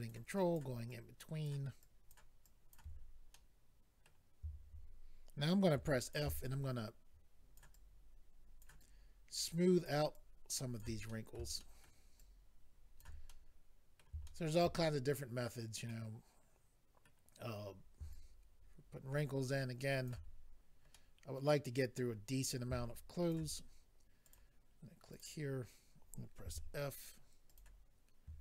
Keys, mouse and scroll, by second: 0.4 ctrl+click, 0.9 ctrl+click, 1.8 ctrl+click, 2.4 ctrl+click, 3.0-3.3 scroll down 3, 3.3 middle click, 6.0 click, 6.0 f, 6.1 click, 6.4 shift+click, 7.7 shift+click, 8.8 shift+click, 10.1 shift+click, 11.1 middle click, 11.6 shift+middle click, 11.8 middle click, 12.1 shift+click, 13.3 middle click, 14.2 shift+middle click, 14.6 middle click, 14.9-15.2 scroll up 2, 15.4 scroll down 2, 15.9 middle click, 18.1 shift+click, 20.2-20.9 scroll down 3, 20.9 middle click, 22.4-22.9 scroll up 2, 22.9 shift+click, 24.2 click, 24.3 click, 25.1 click, 25.4-25.8 scroll up 2, 26.4 f, 27.5 click, 27.6 click.